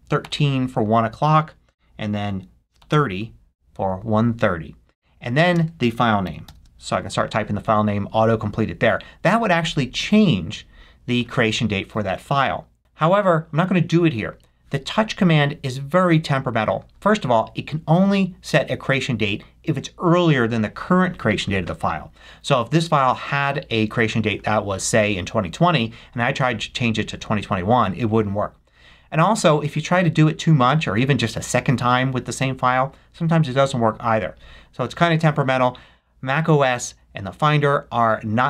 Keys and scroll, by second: 0.0-0.7 typing, 2.6-3.4 typing, 5.4-6.9 typing, 7.0 shift+Tab, 7.7 Tab.